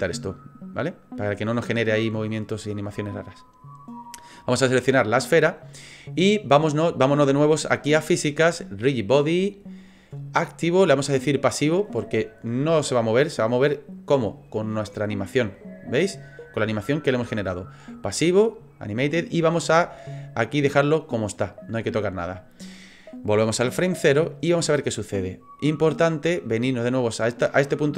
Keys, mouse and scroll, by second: 0.6 click, 3.3 click, 8.8 click, 10.7 click, 15.5 click, 23.1 click.